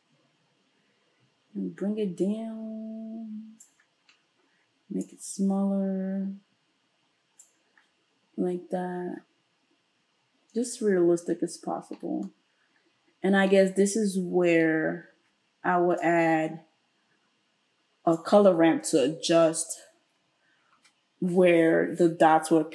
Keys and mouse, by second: 20.8 space.